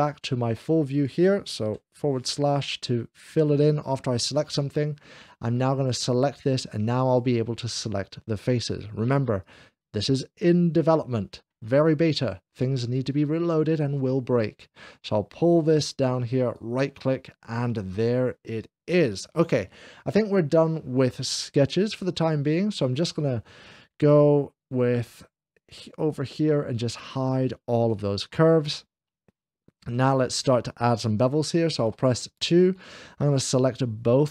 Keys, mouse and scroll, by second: 0.0 ctrl+r, 0.0 scroll down 1, 0.8 click, 1.7 /, 4.1 click, 4.4-5.2 scroll down 1, 4.4 /, 5.8 click, 6.9 shift+click, 8.1 shift+click, 9.3 shift+click, 11.0-12.6 middle drag, 12.3 shift+scroll down 2, 14.4 click, 14.7 shift+scroll down 1, 14.7 /, 16.3-17.4 right drag, 17.4-19.3 middle drag, 22.6 click, 26.8 click, 28.1-29.6 middle drag, 31.6 2, 32.7 scroll up 1, 33.2-34.3 shift+drag.